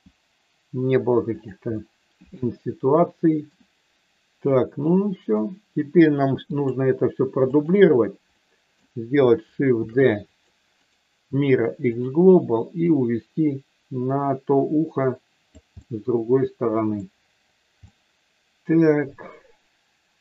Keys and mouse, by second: 1.3 click, 1.7-3.3 middle drag, 5.3 middle click, 6.5 click, 7.5 shift+click, 8.3 middle click, 9.7 shift+d, 10.2 click, 10.8-12.1 right drag, 12.8-15.6 drag, 15.8-16.9 middle drag, 17.8-20.2 middle drag.